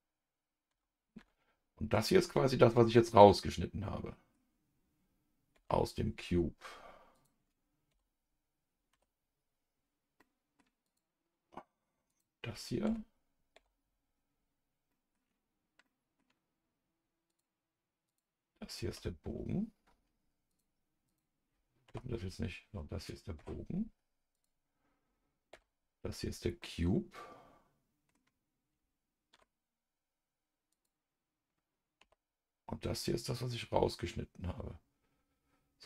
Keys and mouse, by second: 0.7 KP_Divide, 1.1 KP_Divide, 2.4-4.3 middle drag, 5.5 KP_Divide, 7.1 click, 7.9 KP_Divide, 10.2 KP_Divide, 10.2 middle click, 10.8 click, 12.8 KP_Divide, 13.5 KP_Divide, 14.9 middle click, 15.8 middle click, 17.3 click, 18.1 click, 18.9 KP_Divide, 20.5 click, 21.0 click, 21.8 KP_Divide, 23.3 KP_Divide, 24.3 click, 25.5 KP_Divide, 26.6-28.1 middle drag, 29.3 KP_Divide, 30.7 click, 32.0 KP_Divide.